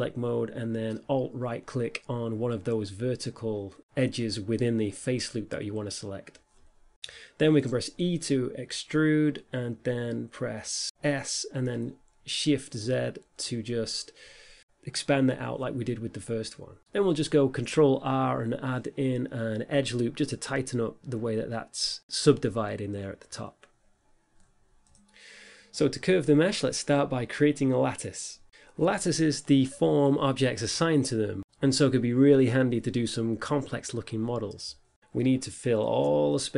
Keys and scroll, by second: 9.4 e, 11.3 s, 11.7 shift+z, 18.9 Tab, 26.2 shift+a, 29.0 s, 31.0 g, 32.4 z, 34.3 7, 34.6 5, 35.4 g.